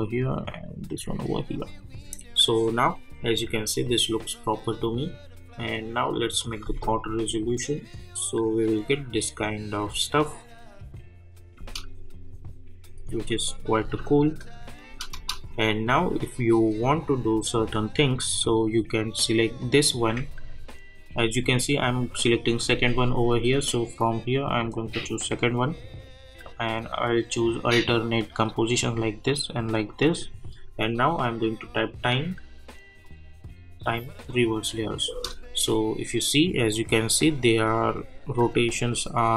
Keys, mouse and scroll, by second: 6.6 space, 11.5 space, 12.4 click, 12.9 space, 14.4 click, 14.9 space, 15.6 click, 19.6 click, 24.3 ctrl+Num_Lock, 24.3 ctrl+click, 31.2 right click, 33.0 click, 35.1 space.